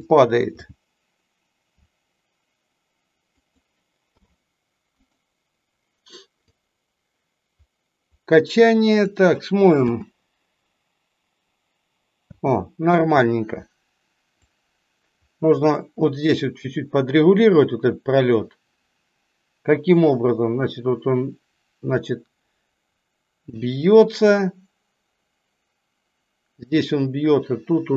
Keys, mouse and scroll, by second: 6.5-9.0 drag, 14.5-27.9 drag.